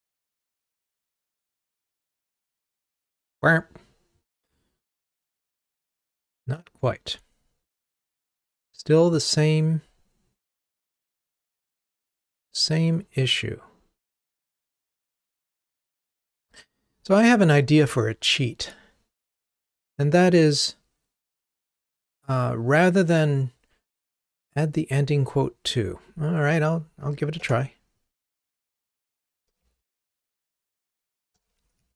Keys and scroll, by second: 27.6 ctrl+Tab, 31.7 super+c.